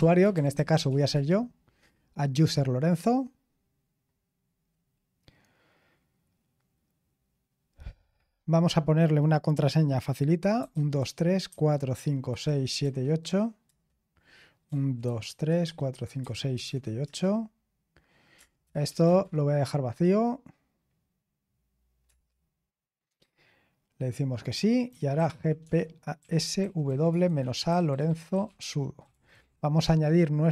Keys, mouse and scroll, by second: 0.0-1.3 typing, 10.3-13.3 typing, 13.6 Return, 14.4-17.1 typing, 18.3 Return, 18.6 Return, 18.8 Return, 22.0 Return, 24.9-29.3 typing, 29.8 Return.